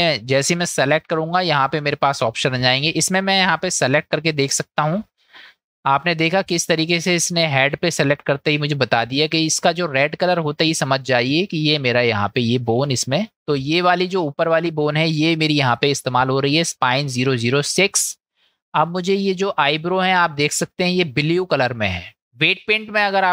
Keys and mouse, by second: 4.6 click, 11.0-12.4 middle drag, 13.3 middle click, 14.5 click.